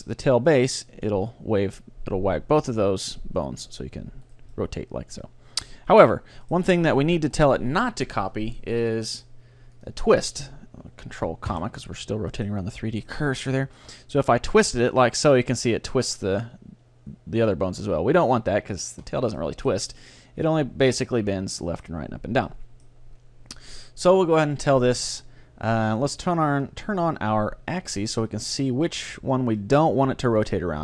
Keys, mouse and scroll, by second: 4.5-6.1 middle drag, 9.4 middle click, 9.8-11.4 drag, 9.8 right click, 11.5 ctrl+,, 12.0-14.2 middle drag, 14.8-16.5 drag, 14.8 middle click, 17.9 ctrl+z, 18.8-20.7 middle drag, 20.8-24.5 middle drag, 23.8 click, 24.5 right click, 26.5-29.6 drag, 28.2-30.8 middle drag.